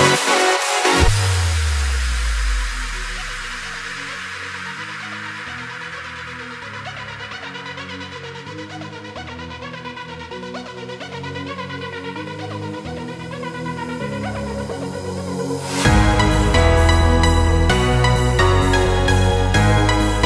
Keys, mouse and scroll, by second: 0.2-1.9 drag, 1.9 Return, 2.8 click, 5.2 click, 7.0 click, 11.0 click, 17.2 click.